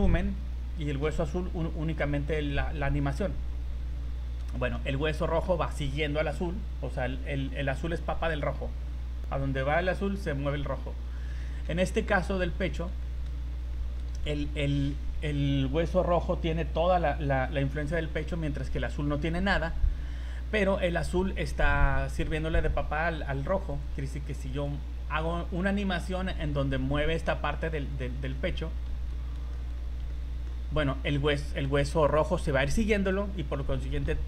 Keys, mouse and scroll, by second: 3.8 scroll down 1, 4.2 scroll up 2, 4.5 shift+middle click, 11.1-11.5 scroll down 4, 12.7 right click, 13.0 shift+middle click, 13.4 scroll up 3, 13.7 shift+middle click, 14.2 scroll down 2, 18.8 right click, 23.8 right click, 24.5 right click, 27.8 middle click, 28.9 KP_1, 29.5 shift+middle click, 30.1 middle click, 32.3 right click.